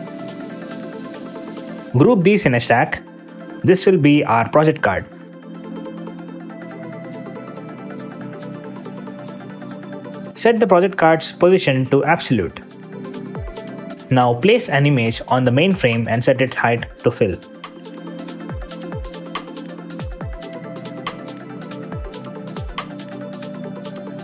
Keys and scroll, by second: 1.1 Up, 2.3 alt+super+Return, 4.6 space, 5.1 space, 5.4 Return, 6.6 super+z, 21.6 g, 21.8 Return.